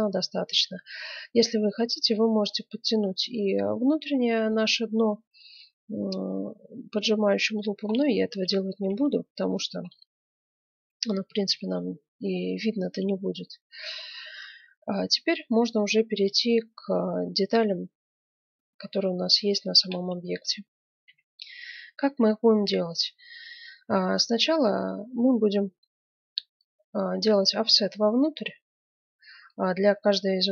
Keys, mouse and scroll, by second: 1.5 Tab, 2.6-4.8 middle drag, 5.0-6.2 middle drag, 7.1 middle click, 7.3-8.8 middle drag, 8.8 KP_1, 9.2-11.2 middle drag, 11.3 middle click, 11.4-13.8 middle drag, 14.7 Tab, 24.2 F9.